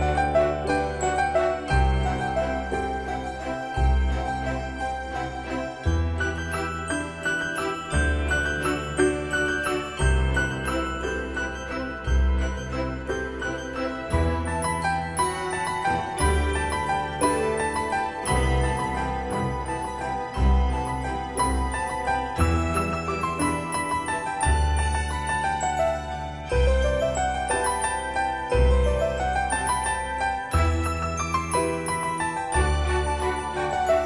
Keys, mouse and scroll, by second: 3.1 click, 9.1-9.6 scroll down 1, 9.8-10.6 scroll up 1, 11.0-11.4 scroll down 1, 12.7 click, 15.5-16.1 scroll up 1, 17.6-18.2 typing, 18.7 click, 20.4-20.9 scroll up 1, 25.4 click, 25.9 scroll down 1, 27.7 scroll up 1, 31.5-32.4 typing.